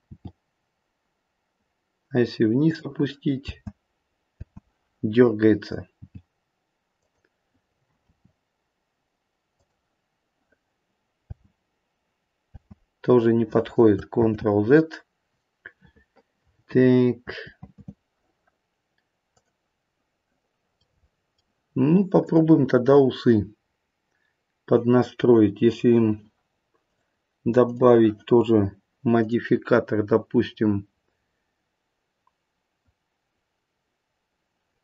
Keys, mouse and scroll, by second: 0.1 g, 3.3 space, 4.4 space, 5.9 g, 8.1 r, 12.5 space, 14.1 ctrl+z, 19.3 click, 20.8 middle click, 22.1 click, 26.8 click, 27.6 click, 29.1 click.